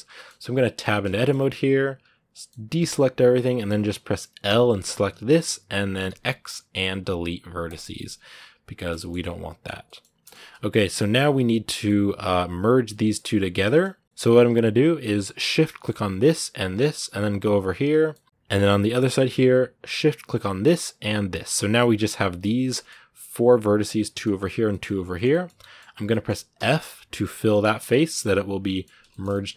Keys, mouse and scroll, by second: 0.6 Tab, 0.9 shift+middle click, 1.1 scroll up 2, 2.1 middle click, 2.6 a, 4.6-7.6 middle drag, 7.6 x, 7.7 scroll down 1, 7.7-9.0 middle drag, 9.0-9.5 scroll up 2, 9.6 middle click, 10.6 scroll up 1, 10.7-14.0 middle drag, 14.0 scroll up 1, 14.0-15.3 middle drag, 15.3-16.7 right drag, 16.7-18.2 middle drag, 18.2 ctrl+z, 18.6-19.7 middle drag, 19.7-21.3 shift+right drag, 21.3-21.7 scroll down 1, 21.7 g, 22.5-25.7 middle drag, 25.7 scroll up 1, 25.9 middle click, 26.4 f, 26.6-28.5 middle drag, 28.5 scroll up 1, 28.5-29.5 middle drag.